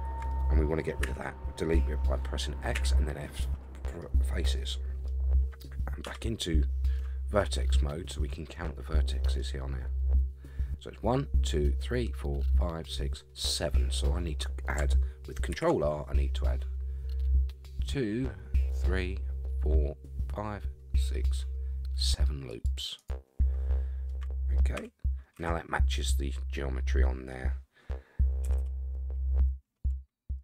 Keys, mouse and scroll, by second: 1.0 x, 3.4 middle click, 4.1 scroll up 1, 4.6 middle click, 5.1-5.4 scroll up 2, 6.0 1, 6.9-9.4 middle drag, 13.8 middle click, 15.5 ctrl+r, 23.8 scroll down 2, 24.1 middle click, 24.8 a, 25.3 a, 26.5 middle click, 27.4-28.0 scroll up 4, 28.0-28.4 scroll down 3, 28.4 a, 28.6 a, 28.9-30.4 middle drag.